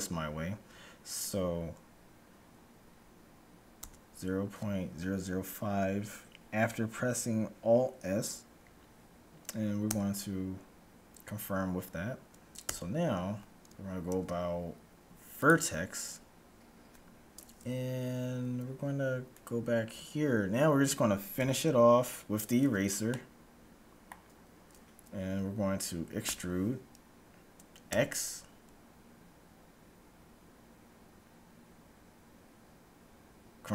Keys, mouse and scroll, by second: 0.9-2.8 middle drag, 0.9-2.4 scroll down 1, 2.4-2.8 scroll down 1, 2.9-5.1 middle drag, 2.9-3.8 scroll up 1, 3.8 Tab, 3.8-4.4 scroll up 1, 4.4 scroll down 1, 9.9 Tab, 12.8 Tab, 14.1 ctrl+Tab, 19.4-21.1 right drag, 21.4 KP_1, 22.9-24.9 middle drag, 26.1 e.